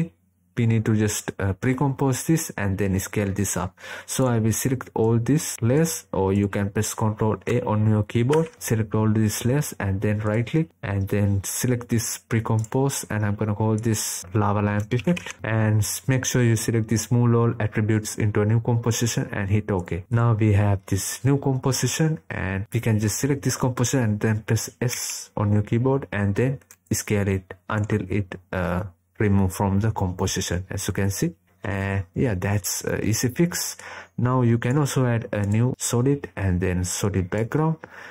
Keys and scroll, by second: 7.6 ctrl+a, 24.7 s.